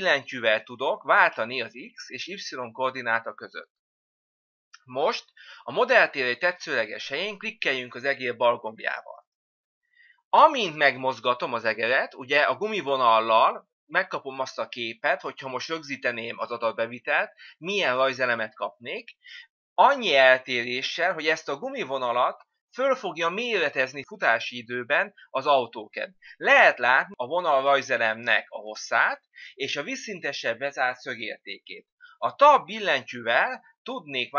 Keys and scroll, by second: 0.0 Tab, 33.0 Tab.